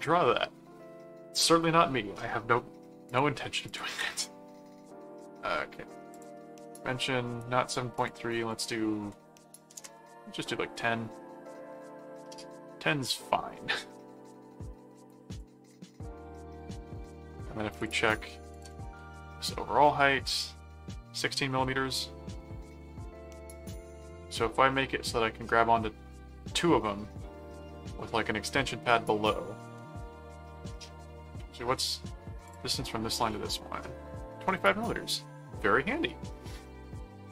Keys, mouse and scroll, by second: 3.1 click, 3.8 click, 6.1 click, 7.0 middle click, 7.9 click, 10.9 middle click, 15.3 click, 17.8 click, 18.5 ctrl+click, 18.8 ctrl+m, 21.5 middle click, 24.4 middle click, 30.0 middle click, 31.4 middle click, 32.5 ctrl+click, 33.1 ctrl+click, 36.7 middle click.